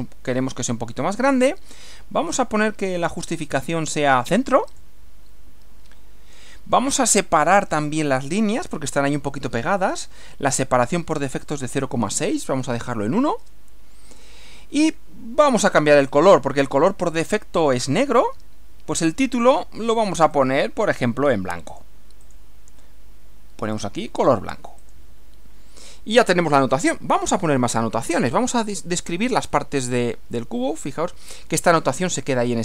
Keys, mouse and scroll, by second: 1.3 click, 3.3 click, 4.8 click, 11.2 click, 13.4 1, 16.1 click, 20.3 click, 21.7 click, 22.3 click, 23.8 click, 24.8 click, 25.9 click, 29.6-31.2 middle drag.